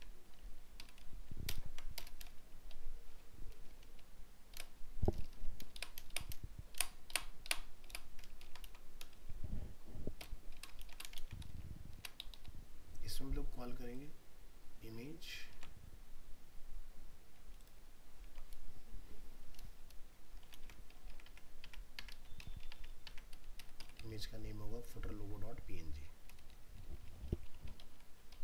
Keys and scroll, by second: 1.5 ctrl+BackSpace, 3.9 ctrl+z, 8.4 ctrl+Home, 8.6 ctrl+c, 11.1 ctrl+Return, 11.2 ctrl+v, 15.5 ctrl+c, 20.6 ctrl+v.